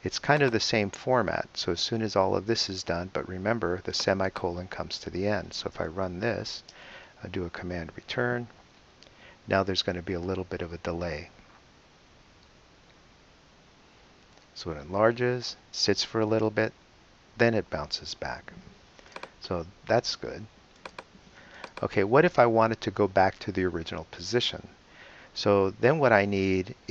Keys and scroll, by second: 0.2 BackSpace, 6.7 super+Return.